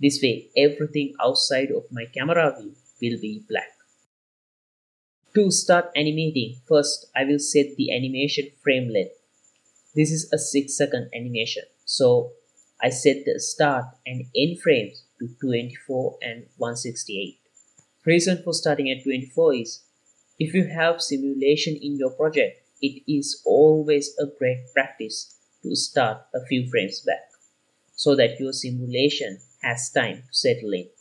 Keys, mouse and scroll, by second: 0.2-1.5 drag, 2.2-2.8 scroll down 4, 2.8-4.5 scroll up 4, 5.2 click, 5.2 KP_Decimal, 6.2-7.3 middle drag, 12.3-13.5 drag, 13.5 KP_4, 14.0-14.4 drag, 14.7 click, 15.2 click, 16.7 click, 18.9 click, 25.9-27.9 drag, 30.2 space.